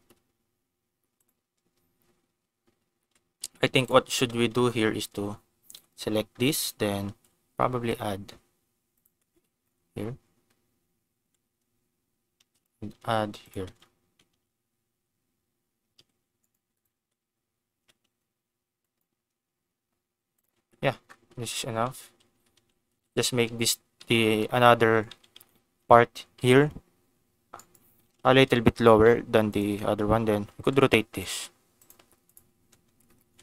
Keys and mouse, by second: 1.2 click, 3.0 Tab, 3.4 Tab, 3.8 click, 4.1 Tab, 5.7 a, 7.1 shift+d, 8.9 click, 9.0 Tab, 11.1 Tab, 12.4 shift+d, 13.4 click, 13.5 Tab, 14.2 ctrl+s, 14.8 Tab, 15.9 z, 16.9 Tab, 16.9 x, 17.7 Tab, 18.8 click, 20.3 click, 20.6 Tab, 21.9 ctrl+z, 22.0 ctrl+z, 22.5 ctrl+z, 22.9 ctrl+z, 23.5 ctrl+z, 24.0 ctrl+z, 24.4 ctrl+z, 25.1 ctrl+z, 25.3 ctrl+z, 26.4 g, 27.5 click, 28.2 o, 28.7 g, 29.4 click, 30.4 r, 31.0 z, 31.7 click, 32.2 click, 32.6 Tab, 33.3 ctrl+s.